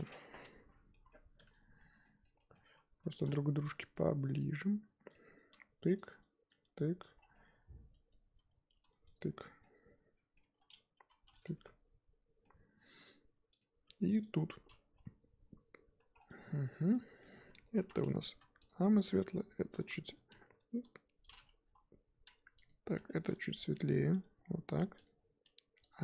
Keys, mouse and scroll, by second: 0.5 l, 0.9-4.4 middle drag, 4.4 click, 5.3 click, 5.5 g, 6.5 click, 6.6 g, 8.1 click, 8.3 g, 9.2 Tab, 9.6-10.4 middle drag, 10.4 Tab, 11.0 g, 11.4 Tab, 11.6-13.6 middle drag, 13.6 click, 13.8 Tab, 14.3 click, 15.0 l, 16.5-16.9 scroll up 4, 16.9 shift+middle click, 17.4-18.7 scroll up 2, 18.7 click, 21.6 l, 22.6 alt+click, 24.2 g, 25.9 click.